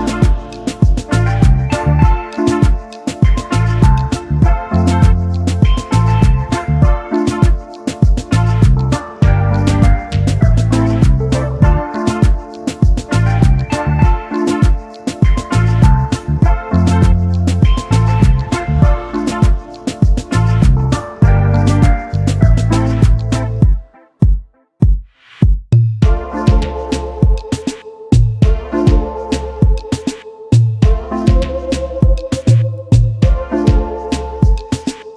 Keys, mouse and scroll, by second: 1.3 v, 2.6 shift+click, 6.6 alt+scroll up 1, 6.8 alt+click, 6.9 space, 7.0 double click, 8.5 x, 9.3 alt+scroll down 1, 10.8 alt+shift+click, 13.0 alt+click, 13.4 alt+scroll up 1, 13.9 space, 15.4 double click, 16.1 alt+scroll down 1, 16.9-19.3 typing, 19.1 double click, 19.7 double click, 21.2 space, 23.7 ctrl+c, 24.0 ctrl+f, 25.1 alt+shift+click, 28.5 space, 29.0-30.0 alt+scroll down 1, 31.5 ctrl+x, 32.0-32.4 alt+scroll up 1, 33.6 space, 34.6 right click.